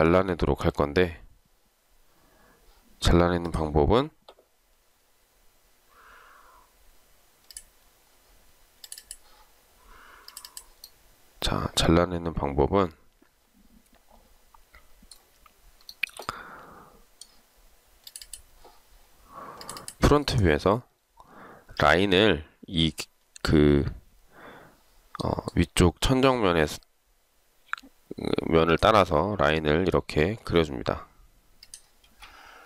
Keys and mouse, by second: 16.1 shift+right click, 32.2 space.